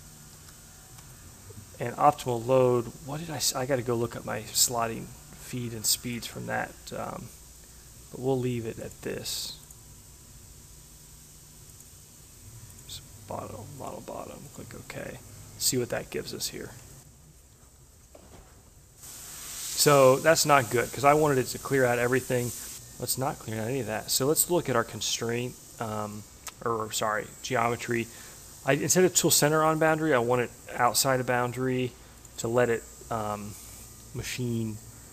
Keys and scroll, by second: 0.2 BackSpace, 1.0 3.